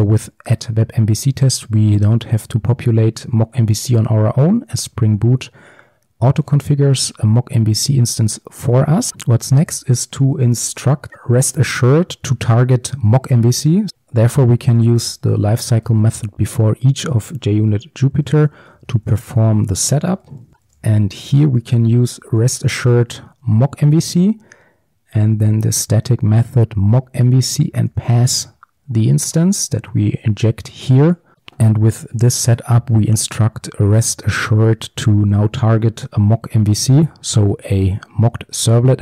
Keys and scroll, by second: 11.1 Return, 13.9 ctrl+z, 23.6 Return.